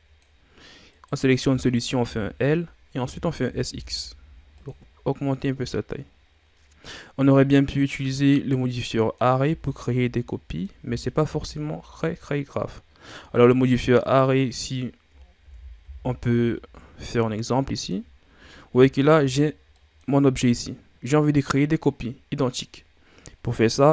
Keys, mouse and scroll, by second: 0.9 right click, 2.0 l, 3.4 s, 5.3-8.5 drag, 9.4 z, 9.8 scroll down 3, 10.1 middle click, 10.8 Tab, 11.2 a, 11.5-14.0 middle drag, 14.0 right click, 15.4 shift+d, 18.2-19.0 ctrl+scroll up 3, 19.0-19.7 shift+scroll up 1, 19.7-22.8 middle drag.